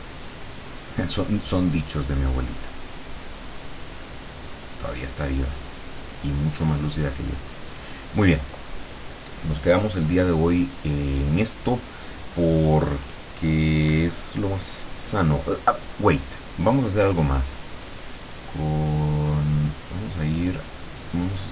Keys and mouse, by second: 3.7-6.6 drag.